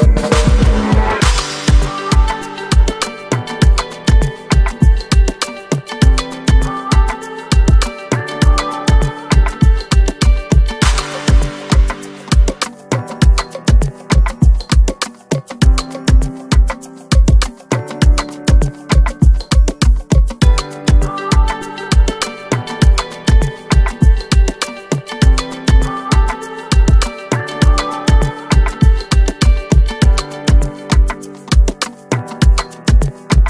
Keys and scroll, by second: 0.0-1.0 typing.